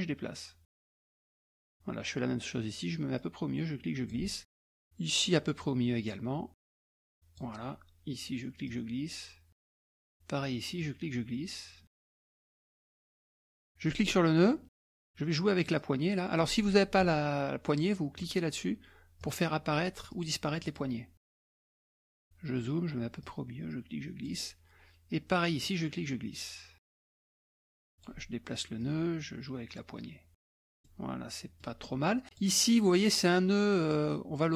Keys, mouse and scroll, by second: 3.2-4.5 drag, 5.6-7.6 drag, 8.7-10.0 drag, 10.8-13.7 drag, 13.8 click, 15.8 click, 18.2 click, 19.2 click, 20.1 click, 20.6 click, 21.8 click, 22.2-22.6 scroll up 1, 23.2-24.6 drag, 25.6-27.5 drag, 27.9 click, 28.8-30.8 drag, 30.8-32.0 middle drag, 30.8-32.0 scroll down 1, 32.2 click, 33.9-34.5 drag.